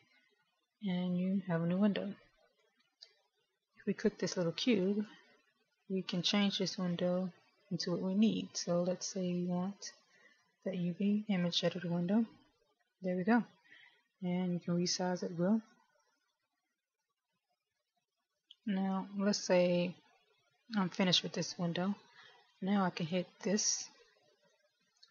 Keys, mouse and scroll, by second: 14.6 click, 24.6 click.